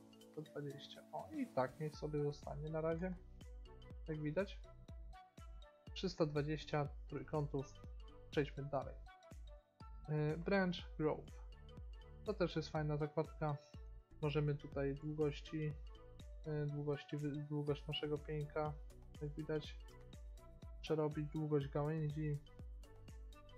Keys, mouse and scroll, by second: 0.4 middle click, 2.3-3.3 middle drag, 9.4-11.4 drag, 11.4-11.8 scroll down 1, 11.9-12.9 middle drag, 15.0-16.9 drag, 18.5-23.5 drag.